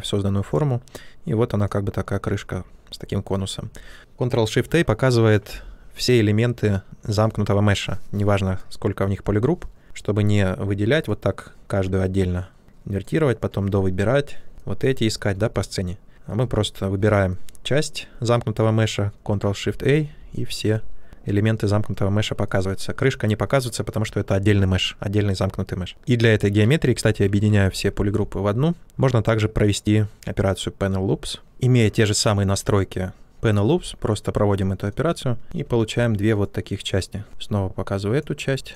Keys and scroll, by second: 19.6 ctrl+shift+a, 27.9 ctrl+w, 37.2 ctrl+shift+a.